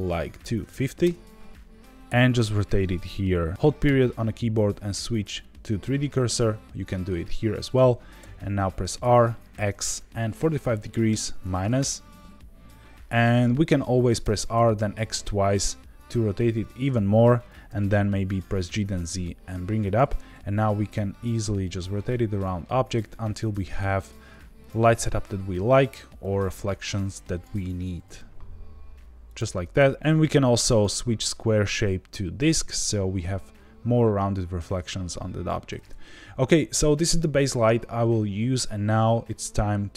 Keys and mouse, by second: 8.1 r, 8.9 x, 10.3 KP_4, 10.3 KP_5, 11.0 KP_Subtract, 11.7 KP_Enter, 14.2 r, 14.5 x, 14.7 x, 17.3 click, 17.6 g, 17.7 z, 19.8 click, 20.1 r, 20.3 z, 24.6 click, 26.2-27.4 drag, 27.7 g, 27.8 z, 28.0 z, 29.2 click, 30.6-32.5 drag.